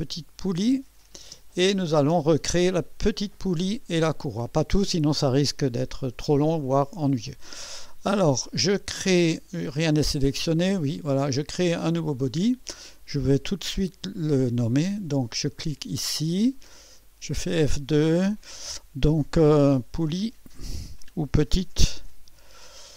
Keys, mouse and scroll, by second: 0.4 click, 1.2 space, 1.8 space, 10.3 click, 11.9 click, 15.6 click, 16.8 F2, 20.5 click, 20.5-22.9 typing.